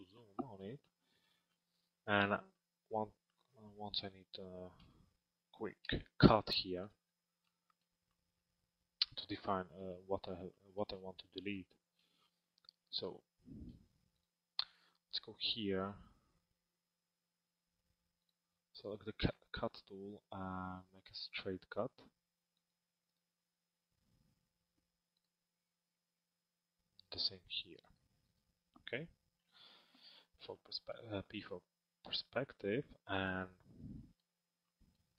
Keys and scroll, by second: 4.6 t, 29.1 p.